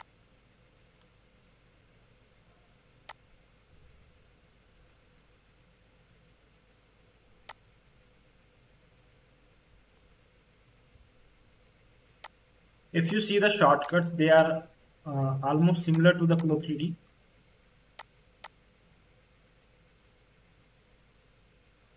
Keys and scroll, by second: 1.0 ctrl+shift+v, 6.0 a, 10.2 m.